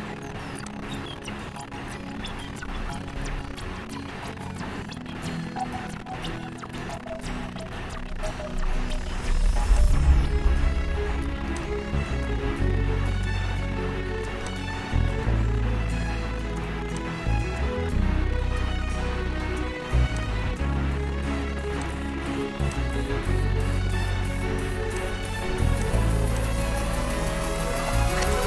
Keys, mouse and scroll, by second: 6.9 click, 10.1 click, 11.8 click, 14.8 click, 17.2 click, 20.5 click, 22.0 click, 23.0 click, 25.3 click, 26.0 click, 27.1 click.